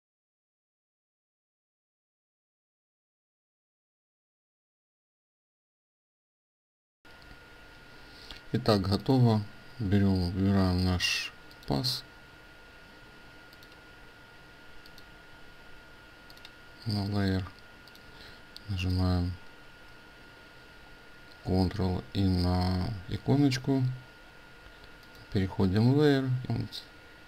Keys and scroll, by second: 4.4 ctrl+space, 6.2 ctrl+alt+space, 26.5 ctrl+shift+i.